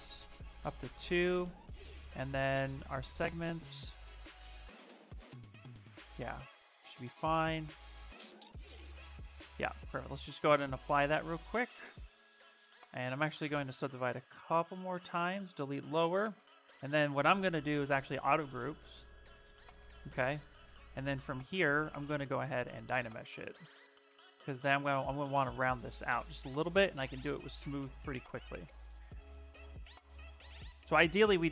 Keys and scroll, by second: 10.4 shift+f, 10.7 shift+f, 13.4 ctrl+d, 14.1 ctrl+d, 15.4 s, 17.3 2, 21.1 2, 24.7 shift+f, 25.2 s.